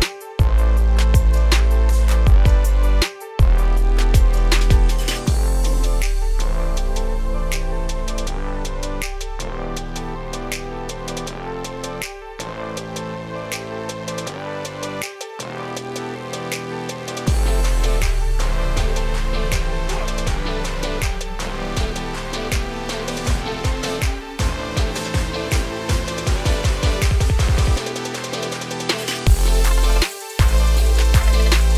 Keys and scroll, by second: 22.7 ctrl+a.